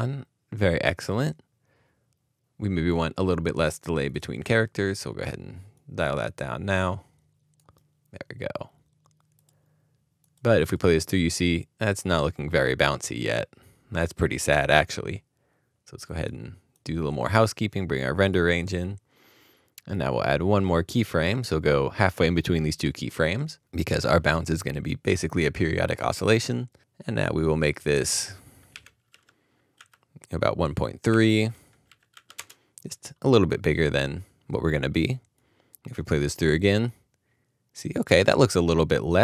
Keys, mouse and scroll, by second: 10.6 Return, 10.8 double click, 27.8 double click, 28.7-29.7 typing, 30.5 Tab, 30.8-31.8 typing, 32.3 Return.